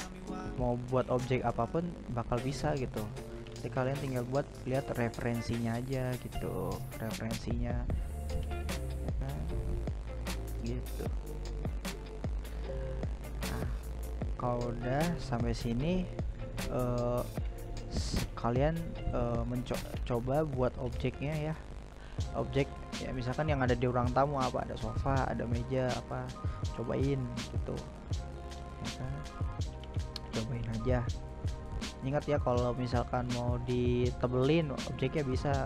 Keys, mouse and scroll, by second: 0.7-1.3 middle drag, 1.3-1.8 right drag, 1.8-3.7 middle drag, 3.7-4.4 scroll up 1, 4.4 right click, 4.5 g, 6.3-6.8 middle drag, 6.8 scroll down 2, 7.0-7.5 middle drag, 7.5-7.9 scroll up 2, 7.9-11.6 middle drag, 11.6 right click, 11.8-12.2 scroll down 2, 12.2-12.5 scroll up 1, 12.5-13.1 middle drag, 13.1-13.4 scroll down 1, 13.4 s, 15.9 right click, 16.1 g, 18.3-20.4 middle drag, 20.4 right click, 21.0-21.5 right drag, 21.5-22.0 middle drag, 22.0-22.5 scroll up 2, 22.5-23.0 middle drag, 23.0-23.3 scroll down 2, 23.3-25.4 middle drag, 25.4 right click, 25.9 g, 28.7-31.1 middle drag, 31.1-33.2 drag, 33.2-35.6 middle drag.